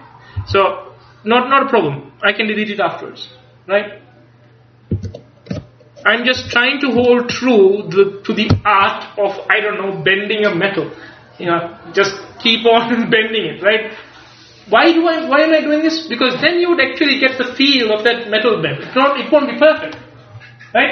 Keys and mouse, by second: 0.5 g, 2.4-4.1 drag, 5.0 a, 6.5 ctrl+s.